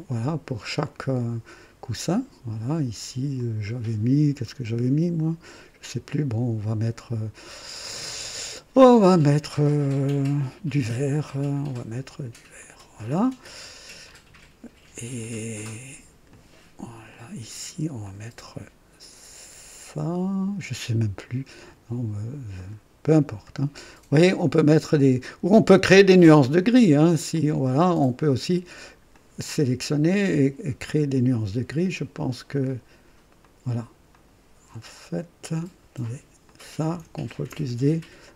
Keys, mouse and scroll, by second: 0.8 click, 2.0 click, 3.3 click, 12.6 click, 16.3 click, 17.1 click, 18.0 click, 22.5 click, 23.4 click, 24.1 click, 27.3 click, 28.2 click, 29.1 click, 30.1 click, 32.1 click, 33.4 click, 34.1 click, 35.5 click, 36.4 click, 37.3 ctrl+d, 38.2 ctrl+click.